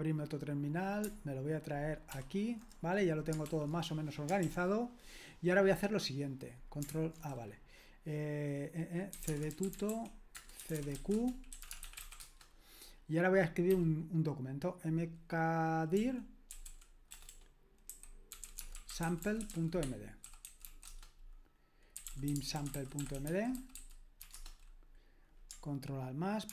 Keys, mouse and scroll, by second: 2.2 super+/, 3.5 super+l, 4.4 super+l, 8.9-12.5 typing, 13.7 typing, 16.0-24.7 typing.